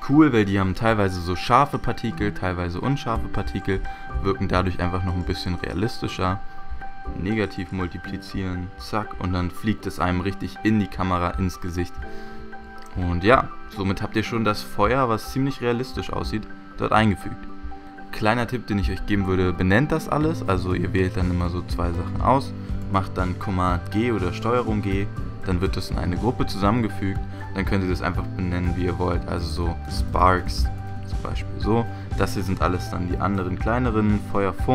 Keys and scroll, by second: 3.2 Return, 12.3 super+j, 12.8 super+z, 24.9 super+g, 28.6-31.0 typing.